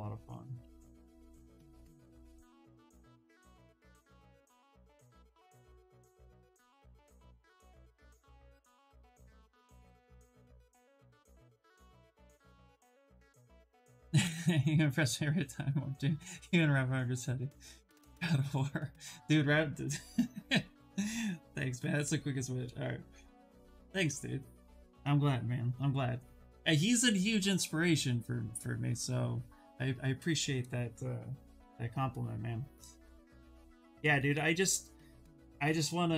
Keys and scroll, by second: 0.5 ctrl+z, 0.8 s, 5.5 s.